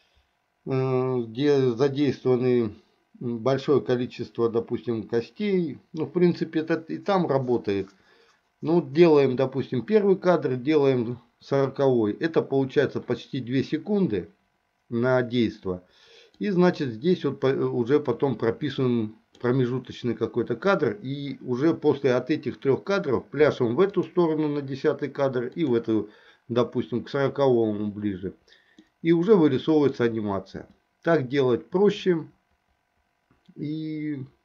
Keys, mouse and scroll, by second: 16.5-19.5 drag, 24.0 click, 25.7 click, 29.0-30.1 middle drag, 32.1-34.4 drag.